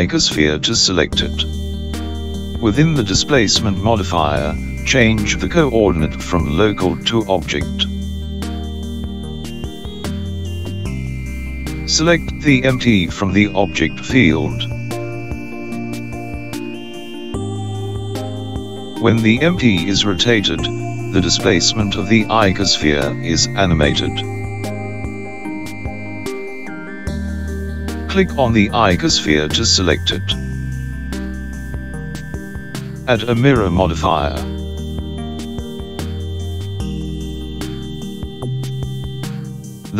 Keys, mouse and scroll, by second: 1.9 click, 7.8 click, 15.1 click, 15.2 click, 21.3 click, 23.2 r, 32.0 click.